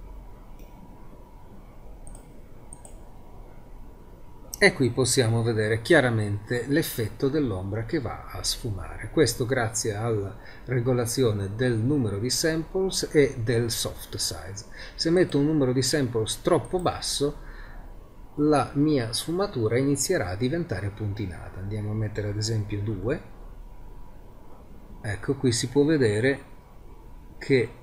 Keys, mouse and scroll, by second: 0.0 click, 2.9 click, 4.1-15.2 middle drag.